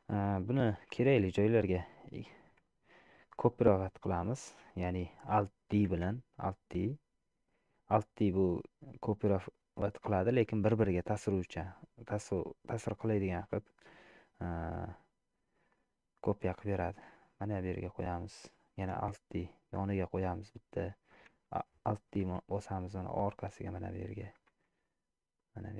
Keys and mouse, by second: 0.6 KP_7, 2.7 shift+middle click, 6.0 alt+d, 19.0 alt+d, 22.3 alt+d.